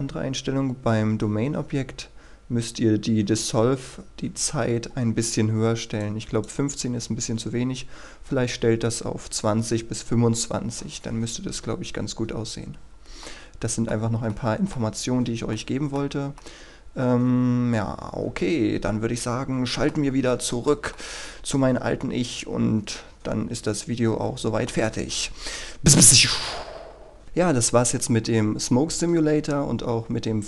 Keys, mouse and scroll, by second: 6.1 click, 13.4 middle click, 15.0-15.6 scroll down 1, 15.6-24.9 middle drag, 27.2-30.4 scroll up 1.